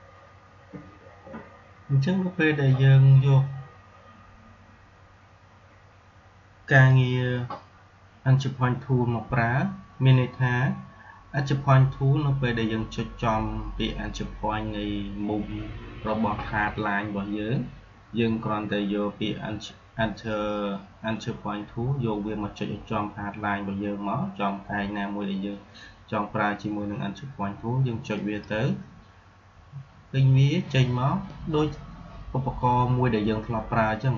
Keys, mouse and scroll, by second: 6.7 click, 28.1 click.